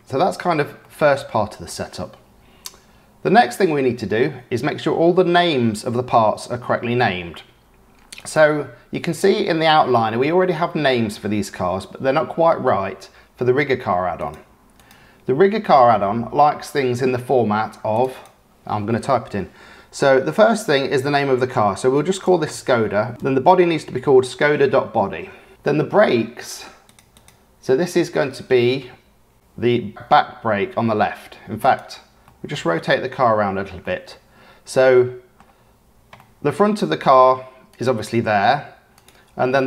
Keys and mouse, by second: 0.8-1.6 drag, 14.2 click, 14.8-18.0 drag, 18.1-25.6 drag, 27.1-31.8 drag, 32.2-33.2 drag, 32.2-33.2 right drag, 33.8-34.2 drag, 34.2-35.3 middle drag, 36.1-37.0 middle drag, 37.6 click.